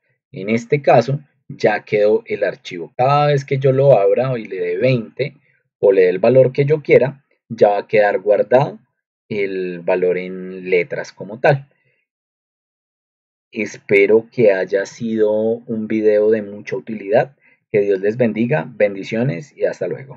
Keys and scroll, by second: 4.2-5.2 typing, 13.3 Up, 13.3 ctrl+alt+2, 14.8 ctrl+alt+1.